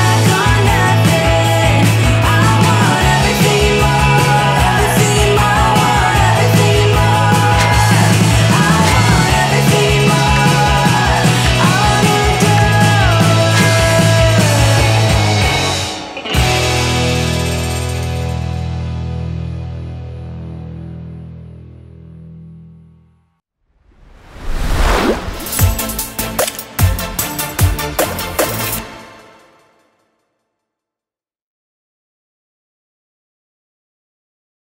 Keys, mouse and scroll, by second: 0.0 ctrl+d, 0.2 Delete, 0.3 shift+Left, 0.7 Delete, 0.8 ctrl+d, 1.3 ctrl+z, 2.9 ctrl+z, 3.3 scroll down 1, 4.4 click, 4.6 ctrl+z, 5.1-5.9 typing, 6.0 ctrl+d, 7.9 scroll up 1, 9.1 click, 12.0 click.